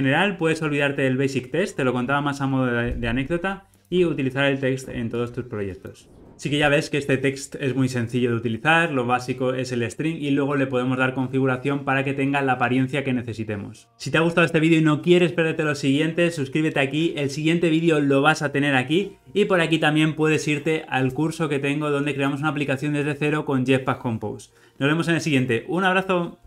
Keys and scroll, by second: 0.2 alt+super+].